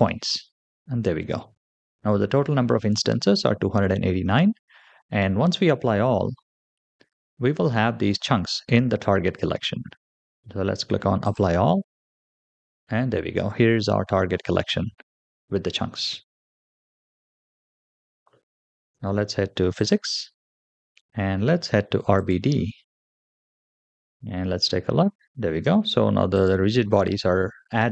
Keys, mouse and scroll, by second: 6.1-9.6 scroll up 3, 9.7-11.1 scroll down 2, 11.1 click, 12.1-12.8 scroll up 3, 17.2-18.1 middle drag, 18.5 shift+middle drag, 19.6 click, 22.0 click, 22.8-24.0 scroll down 2, 24.0 space, 25.4 space, 26.2 click.